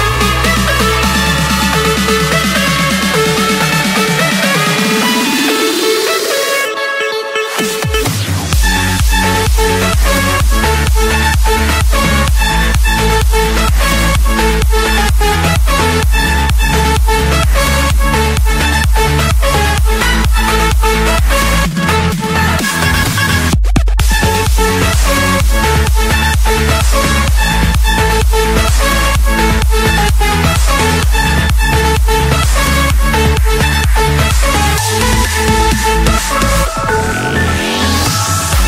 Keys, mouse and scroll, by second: 3.7-4.8 drag, 6.0-6.5 typing, 8.1 Return, 11.0-12.0 drag, 13.5 click, 13.9 shift+click, 15.3-16.3 typing, 17.5 Return, 20.3-20.8 typing, 21.6 Return, 23.0-23.6 scroll down 1, 23.6 middle click, 24.5 middle click, 25.0 middle click, 26.4 c, 27.6 Return, 31.3-32.4 drag, 33.5-35.2 typing, 36.4 Return, 38.2 scroll.